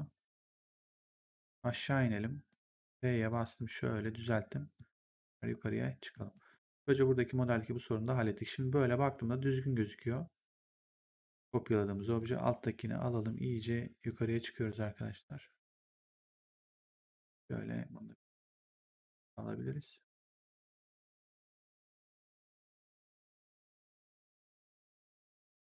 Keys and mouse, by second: 1.3 click, 2.6 r, 3.2 click, 4.1 w, 4.7 click, 6.2 right click, 6.8 ctrl+1, 7.4 click, 9.9 right click, 10.4 click, 12.1 click, 14.0 click, 16.3 click, 17.6 click, 22.6 right click.